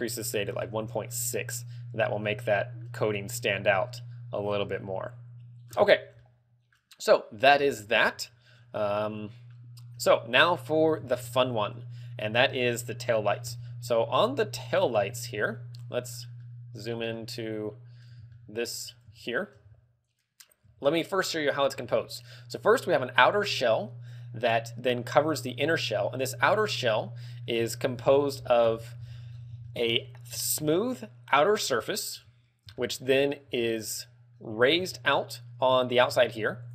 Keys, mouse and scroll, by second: 1.3 ctrl+click, 2.4 middle click, 4.0 middle click, 5.7-6.1 scroll down 10, 6.3 middle click, 7.7-8.2 scroll up 5, 7.9 middle click, 8.3 shift+middle click, 9.1 middle click, 10.2 middle click, 11.1 ctrl+w, 12.1 scroll up 3, 12.7 shift+middle click, 13.6 scroll up 2, 14.9 scroll down 3, 15.3 shift+middle click, 16.5 scroll down 2, 16.6 middle click, 17.3 middle click, 18.5 shift+middle click, 19.4 shift+middle click, 19.8-20.3 scroll up 2, 20.5 right click, 21.0 z, 21.6 scroll up 2, 21.9 z, 24.0 g, 26.1 right click, 26.5 z, 27.3 middle click, 27.8 Tab, 28.2 KP_Divide, 28.9 z, 29.0-30.5 scroll up 8, 29.8 shift+middle click, 30.5 shift+middle click, 31.0 middle click, 31.7 a, 31.9 middle click, 32.4 KP_3, 33.0 middle click, 33.3 scroll up 2, 33.7 z, 34.1 middle click, 34.1 z, 34.7-35.1 scroll up 3, 35.1 middle click, 36.2 ctrl+Tab.